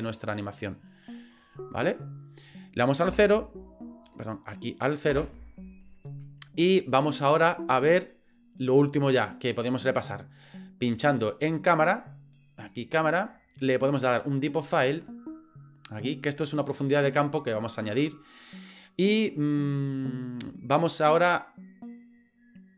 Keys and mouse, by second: 1.0-2.6 drag, 3.1 KP_0, 4.1 click, 5.1 KP_0, 7.0 click, 7.3-9.0 drag, 14.8 click.